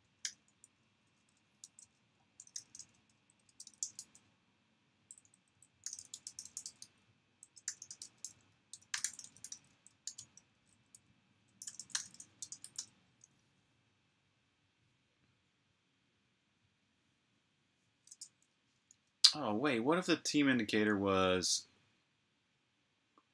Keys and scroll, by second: 0.0-0.6 typing, 1.9-3.4 typing, 4.7-6.2 typing, 7.6-9.4 typing, 11.1-12.8 typing, 18.8 super+Tab.